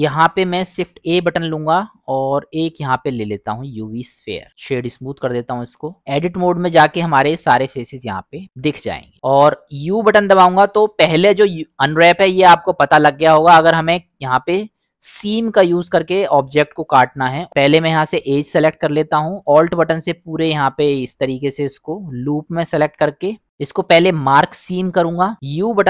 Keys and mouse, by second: 0.6 shift+a, 4.5 right click, 5.3-5.9 middle drag, 6.1-6.6 drag, 8.2 middle click, 9.1 middle click, 10.4 u, 13.0 click, 17.9 click, 20.7 middle click, 23.4 u, 25.1 middle click, 25.3 a, 25.3 u.